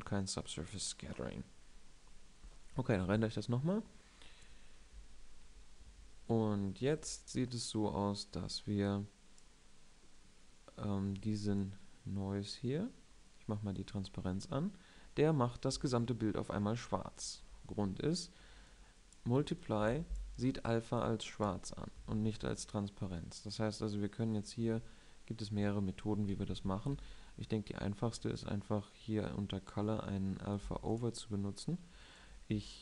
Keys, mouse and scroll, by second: 2.3 drag, 3.8 F12, 6.7 Escape, 9.7 click, 22.8 shift+a, 27.3 shift+a.